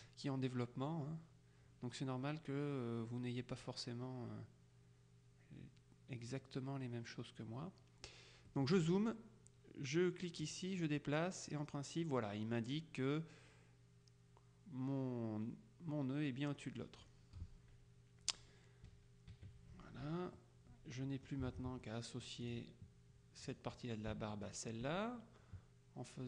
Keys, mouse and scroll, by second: 8.6-9.6 middle drag, 10.6-17.6 drag, 19.0 KP_Subtract, 20.4-21.8 middle drag, 22.5 click, 23.6 click, 24.5 shift+click.